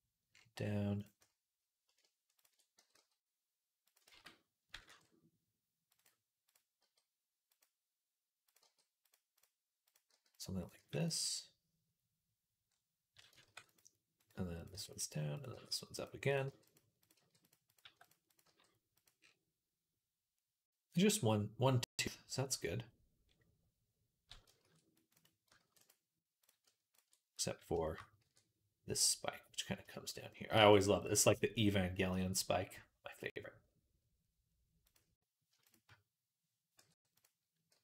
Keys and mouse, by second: 0.1 right click, 2.6 g, 3.9 ctrl+z, 4.7 ctrl+r, 6.6 g, 8.4 g, 9.9 g, 10.6 g, 13.1-14.4 ctrl+middle drag, 13.3 ctrl+r, 14.4 click, 14.6 middle click, 14.6-17.7 typing, 15.2 click, 16.8 click, 17.3 middle click, 17.5 click, 17.6 middle click, 18.1 click, 18.2-25.3 middle drag, 23.1 click, 24.4 ctrl+r, 25.3 ctrl+click, 25.5 ctrl+r, 26.5 ctrl+click, 27.6 shift+click, 28.1 e, 28.5-29.9 middle drag, 30.0-34.7 middle drag, 30.4 g, 34.7 click, 36.6 m, 37.6 g.